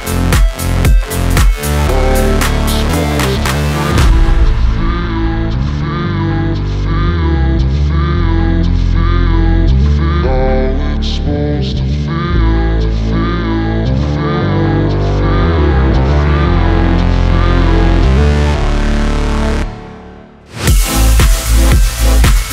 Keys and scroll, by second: 1.7 BackSpace, 4.4 ctrl+z, 14.4 Delete, 17.5 Return.